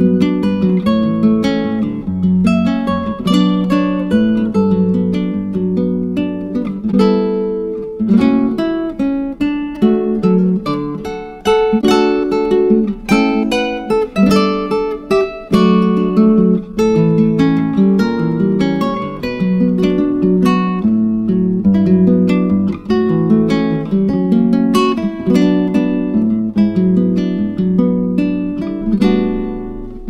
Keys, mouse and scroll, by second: 3.8 scroll down 4, 4.7-6.6 scroll up 15, 6.6-8.9 drag, 8.9-10.6 scroll up 10, 10.6-11.4 drag, 11.6-11.9 scroll down 4, 12.0-12.9 scroll up 3, 12.9-18.4 drag, 20.5-29.9 drag.